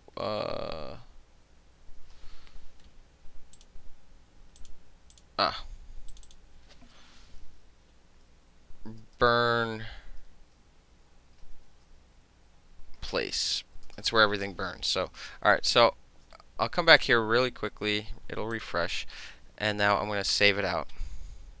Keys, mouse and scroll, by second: 0.0-2.0 typing, 3.2 middle click, 3.6 click, 3.7 middle click, 4.7 click, 4.8 middle click, 5.2 click, 5.3 middle click, 6.2 click, 6.3 click, 8.4 shift+n, 9.2 u, 9.8 m, 11.6 shift+-, 13.0-14.2 typing, 17.0 click, 18.6 click, 19.5-21.6 ctrl+shift+middle drag, 20.4 ctrl+shift+s.